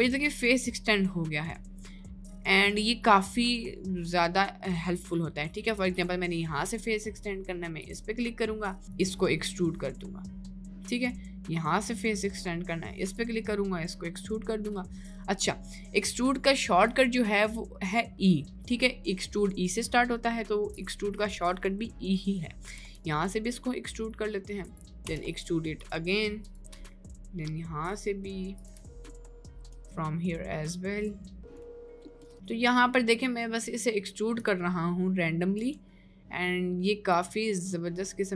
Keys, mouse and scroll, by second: 0.2 middle click, 0.6 click, 1.7-2.7 drag, 3.1-4.5 middle drag, 4.8 middle click, 5.9 click, 6.8 middle click, 8.9-12.0 drag, 12.4 middle click, 13.2-14.7 drag, 16.9 click, 19.5 middle click, 20.3 middle click, 21.3 middle click, 21.7 middle click, 22.9 e, 25.3 e, 26.9 e, 28.8 e, 29.1 middle click, 29.7 e, 31.6 e, 32.1 middle click, 32.1 click, 32.3 e, 33.1 middle click, 33.9 middle click, 34.8 middle click, 35.6 e, 37.4 middle click, 38.0 middle click.